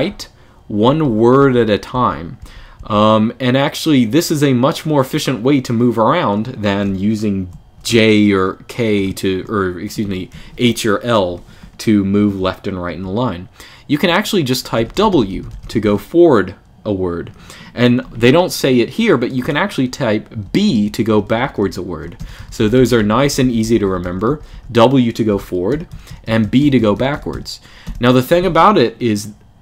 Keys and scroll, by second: 0.0-2.5 typing, 7.2-15.0 typing, 20.2-27.6 typing.